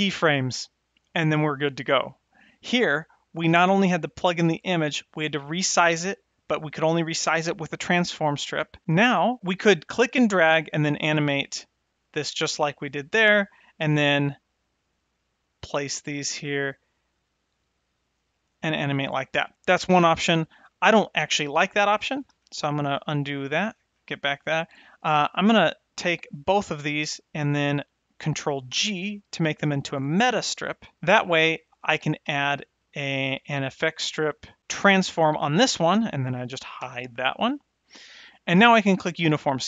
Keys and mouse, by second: 22.1 ctrl+z, 22.3 ctrl+z, 22.9 ctrl+z, 25.9 click, 26.3 shift+click, 28.7 ctrl+g, 32.2 shift+a, 35.8 click, 36.8 h, 37.5 click, 39.0 drag.